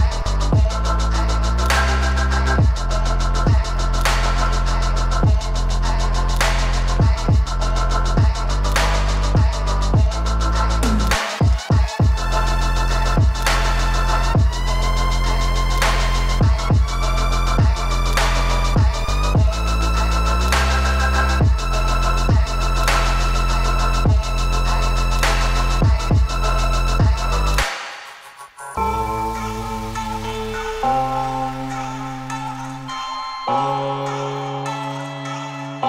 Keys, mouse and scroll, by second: 0.0 F5, 0.7-1.2 scroll up 5, 2.5 click, 4.6 click, 7.0 click, 7.8 F5, 8.1-9.4 scroll down 19, 9.4-9.9 scroll up 8, 10.9 scroll up 3, 12.0-13.2 drag, 14.0 shift+a, 20.8 click, 22.4 shift+a, 30.0-30.5 scroll up 5, 31.0 scroll up 3, 32.6-34.6 drag, 34.6 F5, 34.9 scroll down 2.